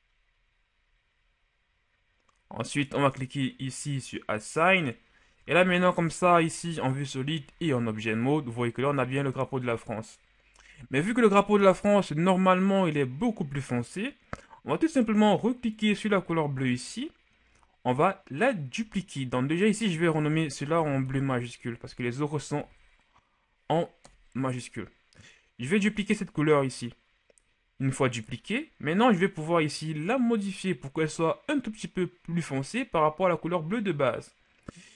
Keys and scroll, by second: 5.4 Tab, 6.4 z, 7.4 z, 20.4 Caps_Lock, 20.8 typing, 22.6 typing, 24.0 Return.